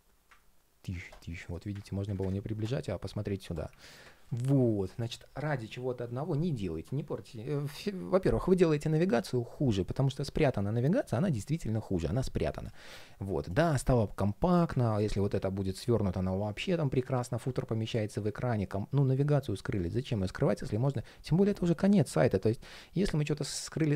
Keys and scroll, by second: 17.8 super+z, 19.8 super+z.